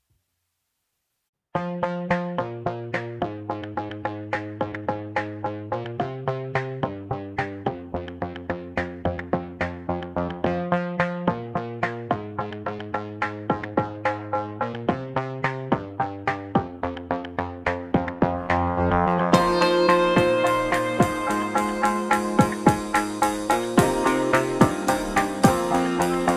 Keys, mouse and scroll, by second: 0.4 click, 1.0 g, 3.6 Tab, 4.1-5.2 scroll down 3, 5.2-6.1 drag, 9.2 shift+d, 12.2 Tab, 12.6-14.1 scroll down 1, 14.1 g, 18.0 ctrl+z, 20.2 click, 23.5 Tab, 24.9 g.